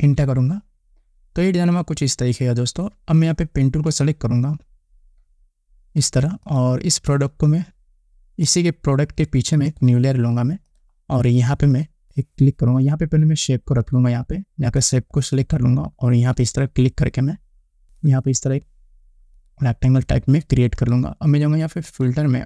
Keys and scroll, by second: 0.1 Return.